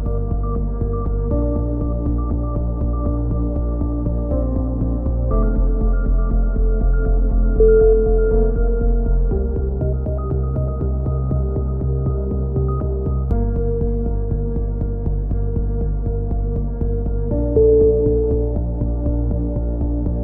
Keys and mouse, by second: 0.1 click, 0.9 click, 2.6 a, 4.1 click, 4.1 right click, 4.3 ctrl+z, 4.9 g, 5.7 a, 6.6 right click, 7.5-9.3 drag, 9.3 right click, 9.3 KP_3, 10.0 g, 11.1 a, 11.3 z, 11.4 click, 11.8 ctrl+z, 11.9 a, 12.4 click, 12.6 KP_3, 13.2 right click, 14.0 right click, 14.8 e, 15.3 click, 16.0 click, 16.3 z, 16.5 click, 17.0 click, 17.5 click, 17.7 right click, 18.5 click, 19.7 click.